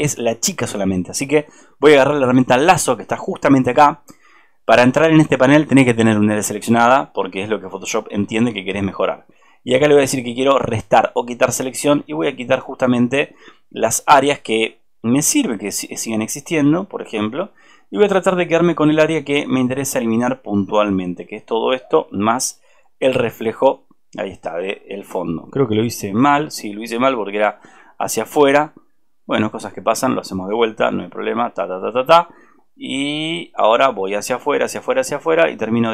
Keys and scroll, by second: 26.3 ctrl+z.